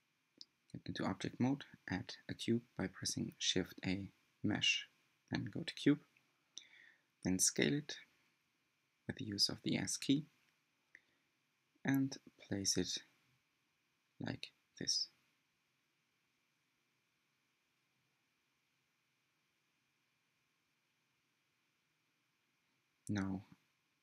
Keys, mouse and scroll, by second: 1.2-2.8 middle drag, 3.7 click, 4.3 scroll up 6, 4.5-5.6 shift+middle drag, 5.6-6.1 scroll down 1, 6.1 g, 8.2 s, 10.3-11.0 scroll up 4, 11.0 shift+middle click, 11.7 g, 14.2 s, 18.4 g, 22.0 Tab, 22.4-22.8 scroll up 3, 22.8-24.0 scroll down 2.